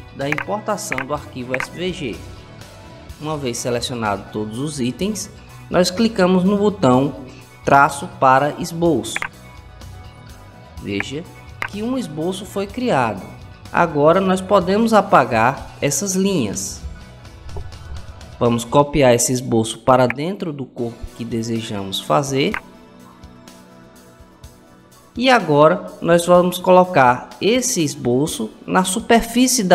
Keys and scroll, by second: 16.5 Delete.